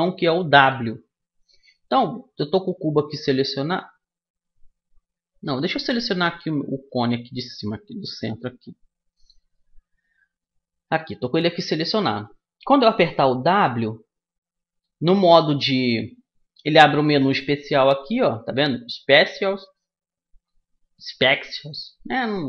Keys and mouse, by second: 1.8-4.6 middle drag, 5.8-7.9 right drag, 7.3-9.1 drag, 7.3 middle click, 8.4-13.1 middle drag, 13.1 w.